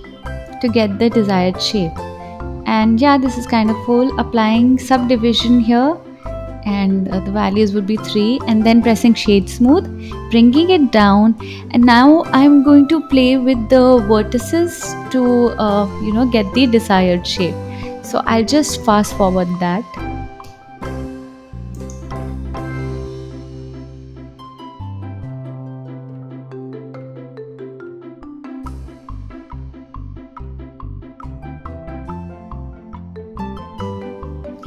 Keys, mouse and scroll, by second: 0.0 click, 1.0-2.0 scroll down 2, 2.0-6.3 drag, 6.3 right click, 6.8-8.0 scroll up 3, 8.1 g, 10.9-16.1 drag, 18.5 ctrl+a, 18.7 ctrl+z, 18.8 click, 19.1 click, 19.6 ctrl+r, 20.1-23.7 typing, 20.3 click, 20.7 click, 21.1 click, 21.7 click, 23.2 click, 24.0 click, 24.1 scroll down 2, 24.2 scroll up 2, 24.4 click, 24.9-26.4 typing, 25.8 click, 26.0-26.6 scroll down 2, 26.6 click, 26.7 click, 26.9 alt+z, 26.9 click, 27.0 scroll up 5, 27.4 click, 27.6 click, 28.3-32.7 typing, 28.5 ctrl+z, 28.7 click, 29.1 scroll down 2, 29.4 click, 29.5 click, 30.0 click, 31.2 click, 32.0 click, 32.5 click, 32.6 click, 33.1 scroll down 1, 33.4 click, 33.7 click, 33.9 g, 34.3 scroll up 2, 34.4 s, 34.5 g, 34.6 click.